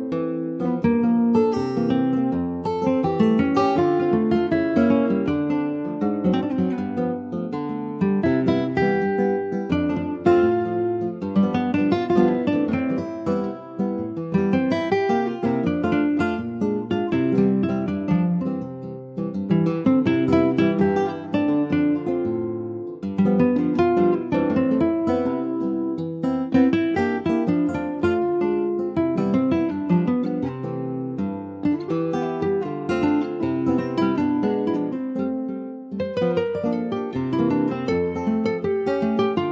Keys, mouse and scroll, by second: 0.4 click, 2.1 click, 2.3 scroll down 3, 2.6 middle click, 3.0 ctrl+s, 3.1 click, 3.6 shift+middle click, 4.5 ctrl+s, 4.6 click, 5.2 shift+d, 6.1 click, 7.7-8.1 shift+scroll up 4, 8.1 middle click, 9.0-10.0 scroll up 4, 9.1 middle click, 9.6 shift+middle click, 10.0-11.4 middle drag, 11.4 ctrl+s, 11.5 middle click, 12.0 scroll up 1, 12.2-14.9 shift+middle drag, 14.9 click, 18.2 middle click, 18.8 ctrl+s, 19.4 ctrl+z, 20.6-22.0 middle drag, 22.0 Tab, 22.4 click, 23.2 middle click, 24.2 Tab, 26.0 ctrl+s, 26.9 middle click, 27.4 scroll up 1, 27.6-29.2 shift+middle drag, 29.2 shift+click, 30.3 /, 30.8 middle click, 31.3 click, 31.7 click, 32.3-33.7 middle drag, 33.7 click, 36.5 middle click, 37.6 alt+middle click, 38.1 alt+z, 38.4 scroll up 2, 38.7 shift+middle click, 39.0 shift+scroll up 2, 39.2 Tab.